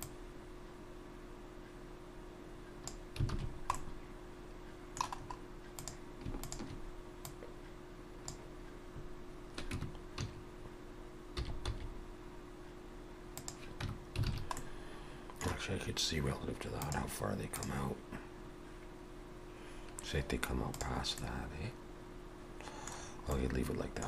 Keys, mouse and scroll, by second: 0.0 click, 3.3 alt+a, 3.4-3.8 scroll down 3, 3.8 middle click, 5.2-5.8 scroll up 2, 5.8 click, 6.5 shift+click, 7.3 click, 9.8 Tab, 10.1 a, 11.4 s, 13.9 Tab, 14.3 alt+a, 14.6 middle click, 21.2 middle click, 23.0-24.0 scroll down 3, 23.3 middle click.